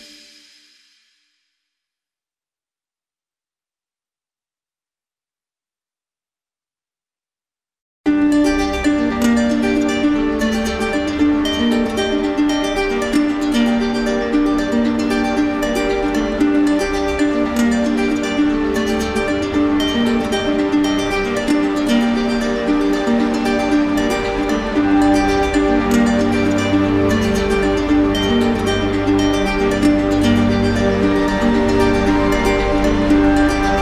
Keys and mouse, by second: 0.0-1.1 drag, 2.2-3.3 drag, 6.9-7.9 drag, 8.4-9.4 drag, 10.2-11.3 drag, 11.6-12.6 drag, 13.9 click, 14.9 click, 16.3 click, 17.2 click, 18.7-19.8 drag, 21.4-22.5 right drag, 25.0-26.0 drag, 29.6 click, 29.8 click, 33.7 click.